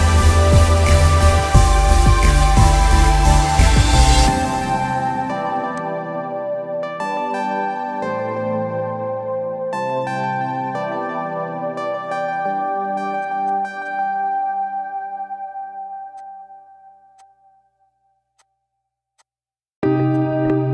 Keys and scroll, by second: 4.1 Delete, 6.4 ctrl+=, 6.5 ctrl+=, 6.7 ctrl+=, 7.6 ctrl+=, 7.7 ctrl+=, 8.6 ctrl+=, 9.9 b, 11.4-13.0 typing, 16.7 ctrl+z.